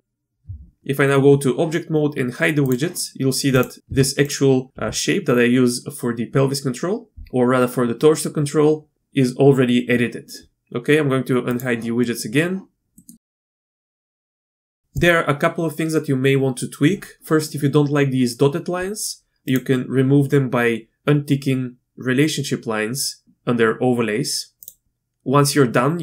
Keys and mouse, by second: 0.4 Tab, 2.6 click, 3.9 Tab, 4.7 g, 11.5 click, 12.0 middle click, 12.9 middle click, 13.6 Tab, 19.6-26.0 drag.